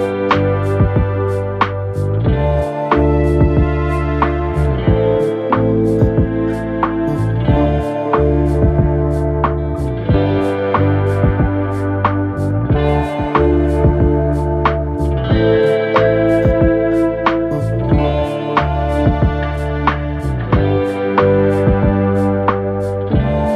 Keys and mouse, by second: 0.0 alt+click, 0.1 alt+x, 0.3 click, 0.5 alt+click, 0.7 r, 1.0 click, 2.1 click, 2.1 w, 2.6 4, 2.9 alt+click, 3.1 alt+click, 3.3 alt+middle click, 3.6 alt+x, 3.8-4.2 drag, 4.3 middle click, 4.5-4.9 drag, 5.2 alt+middle click, 5.3 alt+click, 5.8 alt+middle click, 6.1 alt+click, 6.3 click, 9.6-11.1 shift+drag, 12.0 alt+click, 12.4 click, 13.1 shift+click, 15.6 alt+click, 17.5 click, 19.2 click, 19.8 alt+click.